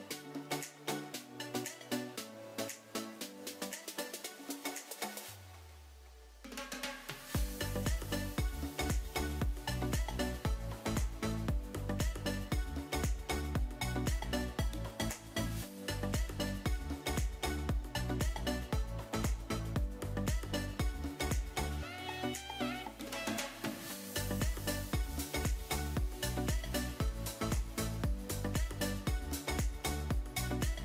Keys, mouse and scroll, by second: 2.0 click, 5.1 click, 9.2 middle click, 9.7 middle click, 10.3 middle click, 10.8 KP_3, 14.1 click, 20.1 click, 20.7 click, 21.8 click, 26.0 ctrl+j.